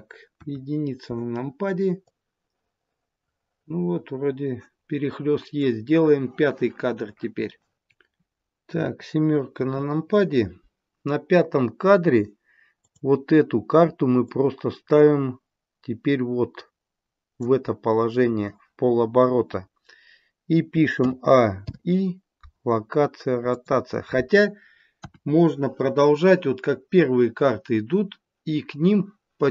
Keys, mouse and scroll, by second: 0.3 KP_1, 2.1 click, 9.5 KP_7, 12.8 click, 14.1 click, 20.9 a, 21.5 i, 24.9 KP_1.